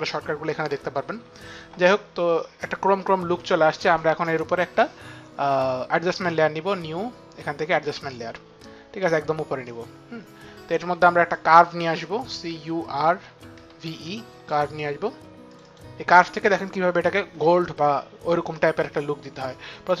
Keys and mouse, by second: 4.4 right click, 7.8 click, 7.8 right click, 9.0 click, 11.3 click, 12.1-14.2 typing.